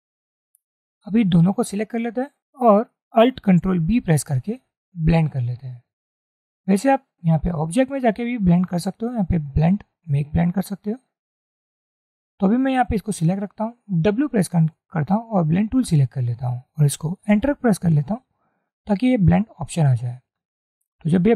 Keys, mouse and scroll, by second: 1.7-2.5 drag, 3.9 ctrl+alt+b, 14.4 w, 17.4 Return.